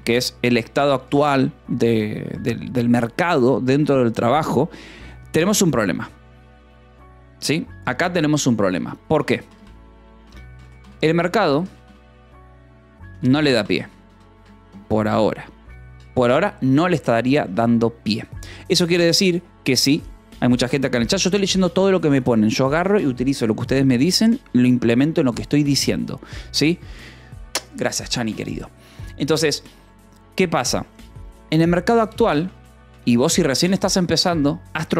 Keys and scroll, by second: 8.5-11.8 typing, 12.9-14.2 typing, 14.3 Escape, 16.6 j, 18.0 ctrl+s, 32.0 b, 34.5 Escape.